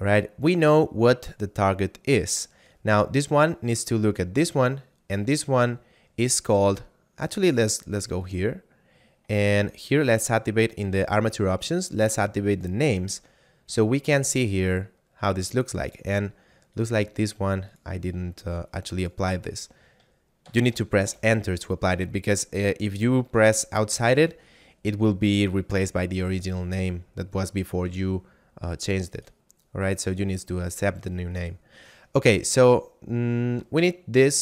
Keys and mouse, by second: 8.2 click, 12.5 click, 16.7 right click, 17.7 click, 20.4 shift+l, 21.0 Return, 29.1 right click, 31.2 right click, 34.3 right click.